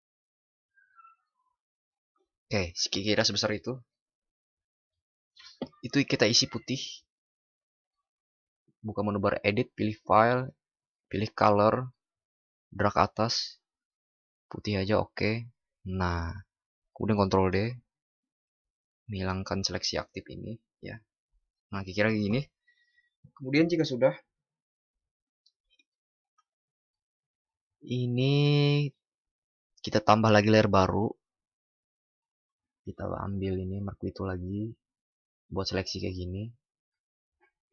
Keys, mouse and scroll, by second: 19.1 ctrl+d, 30.7 click.